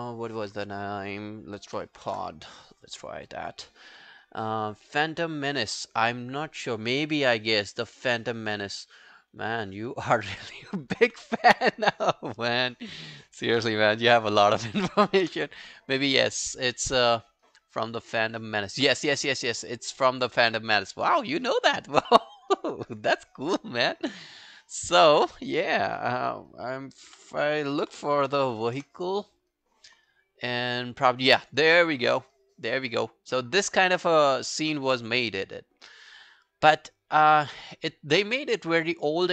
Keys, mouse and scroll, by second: 1.4-2.5 typing, 14.1 ctrl+v, 15.3 Return, 25.9-29.1 typing, 38.5-39.3 scroll down 4.